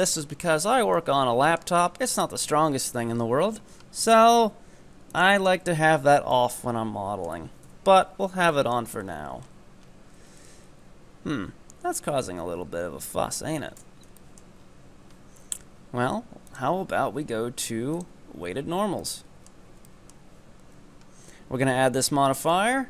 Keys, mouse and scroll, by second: 0.5-1.0 scroll down 4, 1.0-2.2 middle drag, 2.2-5.2 scroll up 5, 5.2 click, 5.7 Tab, 6.1 scroll down 5, 6.3 Tab, 6.4-7.7 middle drag, 7.7 KP_7, 8.3-8.6 scroll up 2, 8.6 shift+middle click, 9.0-10.2 scroll up 8, 10.2 Tab, 10.8 Tab, 12.2 scroll down 4, 12.7 Tab, 13.6 Tab, 13.8 scroll down 2, 14.2-14.6 shift+middle drag, 14.6-15.1 scroll up 6, 18.0-18.6 drag, 18.6-19.1 scroll down 3, 19.1-20.0 shift+middle drag, 21.5-22.5 scroll down 4, 22.5-22.8 drag.